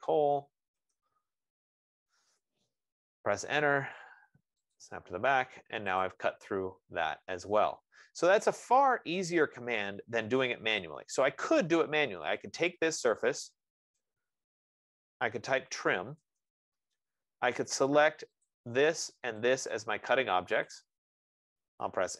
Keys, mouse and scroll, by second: 0.0-1.1 typing, 2.8 click, 3.6 Return, 5.2 click, 6.4 click, 7.0 scroll, 10.2 right click, 10.8-11.5 scroll, 11.8-12.5 scroll, 13.0 click, 14.5 Escape, 15.9-16.9 typing, 18.6-21.0 typing, 18.9 click, 19.7 click, 21.1 click.